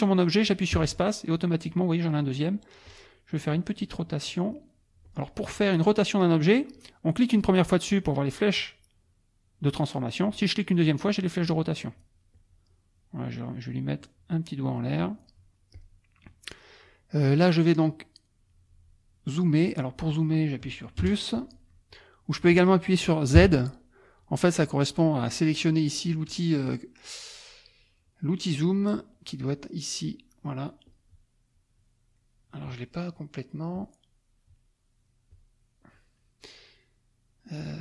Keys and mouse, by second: 0.8 space, 2.9 click, 3.5 click, 5.0 click, 5.5 click, 10.3 click, 11.4 click, 12.3-15.5 drag, 15.7 click, 21.0 KP_Add, 21.6 middle click, 21.8 click, 23.4 z, 29.5 click, 30.8 click, 33.7 click, 35.3 click.